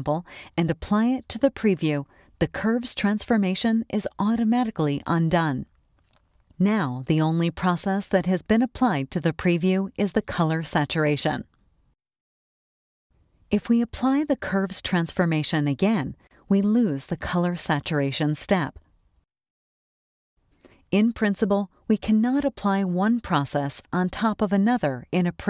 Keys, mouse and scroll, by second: 5.3 click, 6.3 click, 7.1 click, 7.9 click, 8.7 click, 12.0-12.9 scroll up 1, 13.6 click, 16.1-17.0 drag, 17.6 click, 18.4 click, 19.8 click.